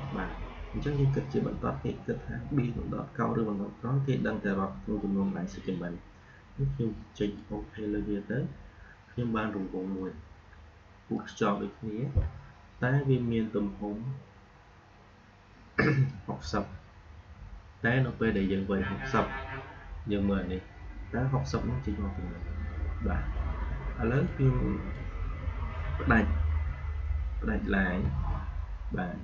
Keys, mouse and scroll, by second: 7.1 click, 11.0 click, 16.0-20.9 drag, 24.2-27.4 drag, 27.9 a.